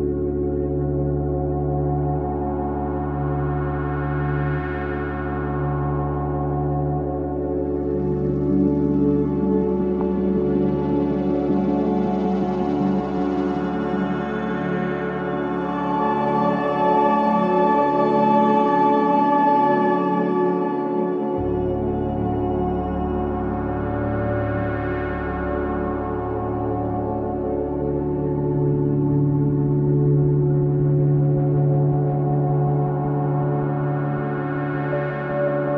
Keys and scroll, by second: 13.9 Down, 14.3 Up, 14.7 Up, 15.1 Down, 29.5 i, 30.6 ctrl+x, 30.9 ctrl+c, 32.0 ctrl+v, 34.1 ctrl+KP_0, 35.0 ctrl+space.